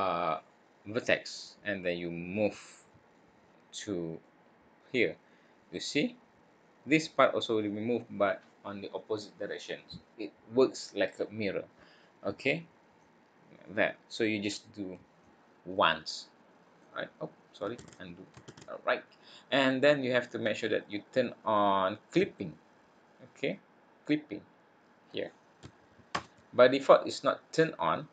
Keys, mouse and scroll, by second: 2.3 click, 4.2 click, 13.0 click, 15.2 click, 16.3 click, 17.7 ctrl+z, 18.4 ctrl+z.